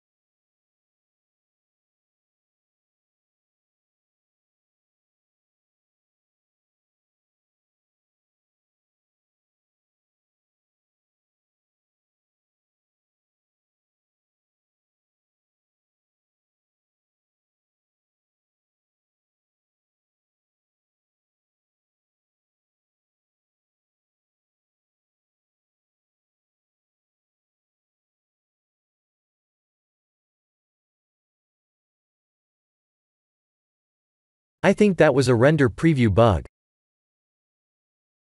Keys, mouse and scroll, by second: 3.5 click, 4.9 click, 7.7 click, 9.3 click, 22.2 shift+`, 26.6 click, 27.6 click, 31.7 click.